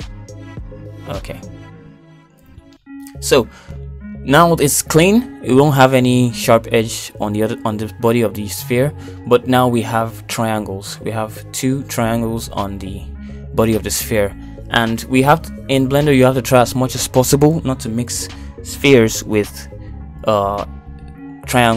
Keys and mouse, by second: 3.0 middle click, 3.5 Tab, 3.8 middle click, 4.5 shift+middle click, 5.5 shift+middle click, 6.1 middle click, 7.3 shift+middle click, 7.7 Tab, 8.4 shift+middle click, 9.4 shift+middle click, 21.5 shift+z.